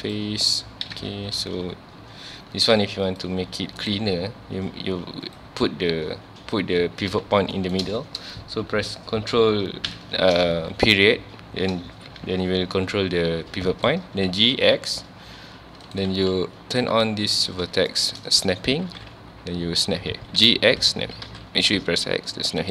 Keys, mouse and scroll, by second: 0.9 Tab, 3.1 click, 3.8-5.3 right drag, 5.3 click, 6.4 scroll up 1, 7.6-9.9 shift+middle drag, 9.9 ctrl+., 12.2 g, 13.9 right click, 14.3 g, 16.0 right click, 16.8-17.9 drag, 17.9 shift+middle click, 18.2 scroll up 1, 18.8 g.